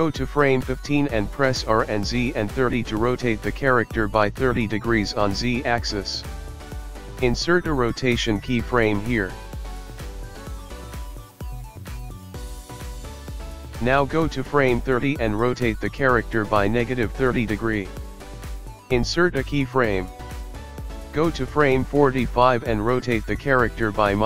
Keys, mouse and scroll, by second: 0.4 click, 4.1 r, 11.8 i, 13.9 click, 16.2 r, 20.0 i, 20.9 click, 23.0 r.